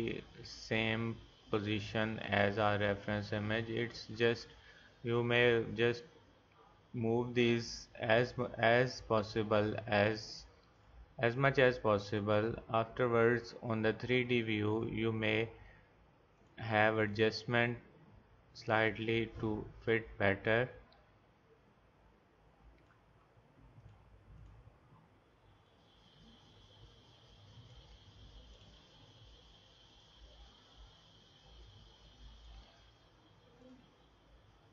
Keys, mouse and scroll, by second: 5.4-8.6 drag, 10.8-15.5 drag, 14.8 scroll down 1, 23.8-27.5 drag, 28.5-32.4 drag, 33.6-34.7 drag.